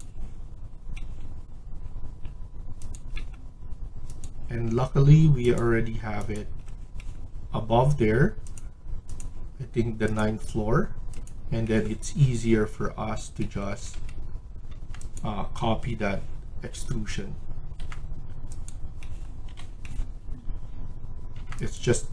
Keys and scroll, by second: 13.6 Escape, 13.8 Escape, 14.7 Tab, 15.8 Delete, 17.7 Tab, 19.4 Delete, 21.2 Tab.